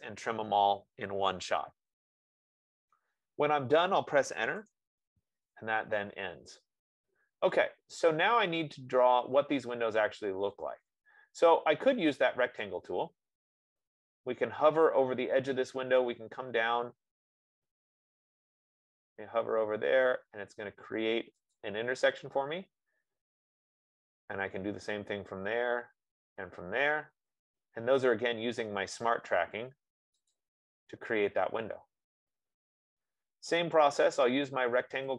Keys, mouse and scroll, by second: 2.5 click, 5.0 Return, 8.6 click, 13.1 click, 21.9-26.9 drag, 30.8-35.1 drag.